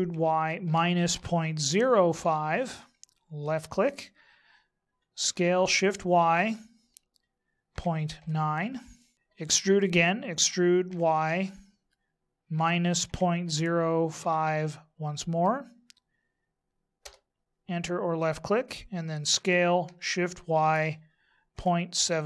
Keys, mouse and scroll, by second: 5.2 s, 10.4 e, 19.2 s.